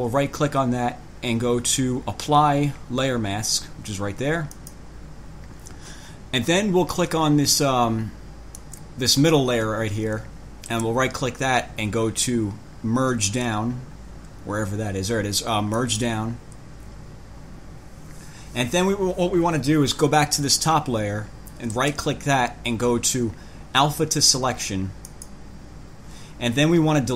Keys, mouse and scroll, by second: 0.0 right click, 4.7 click, 8.8 click, 10.9 right click, 16.0 click, 20.6 click, 21.9 right click, 25.3 click.